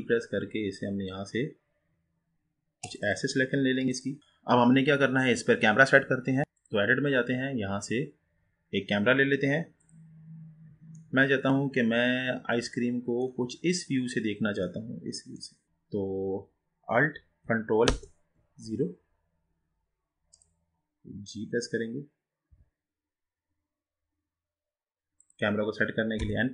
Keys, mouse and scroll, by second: 3.3 click, 4.2-10.1 middle drag, 10.1 click, 11.1-13.7 middle drag, 13.7 scroll up 4, 14.8-17.9 middle drag, 17.9 ctrl+alt+KP_0, 20.7 click, 22.5 g, 26.3 n.